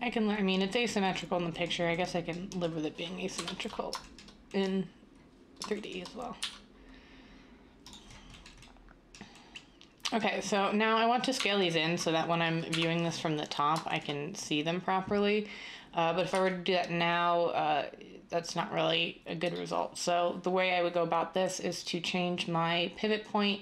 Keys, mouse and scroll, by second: 3.3 7, 6.4 e, 11.4 1, 12.7 7, 16.3 s.